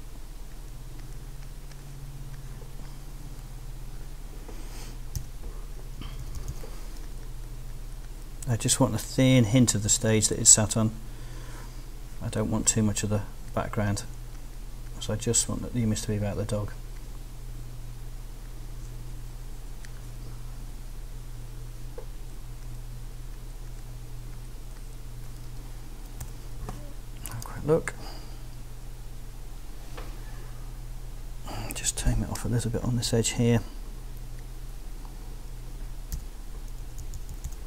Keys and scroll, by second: 5.2 x, 6.0 ], 26.2 super+r, 27.1 r, 33.2 z, 36.1 b, 36.8 [.